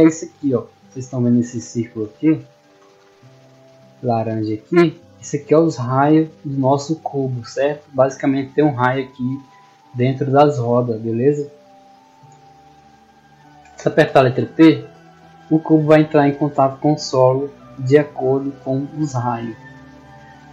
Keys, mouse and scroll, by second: 1.8 Tab, 5.4 Tab.